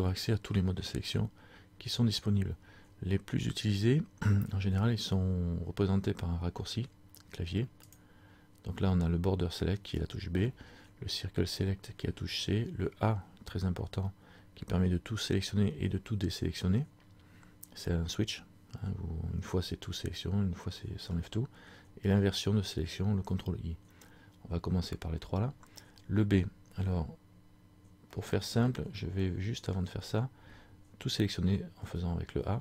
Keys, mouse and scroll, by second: 7.9 click, 28.2 middle click, 31.8 a.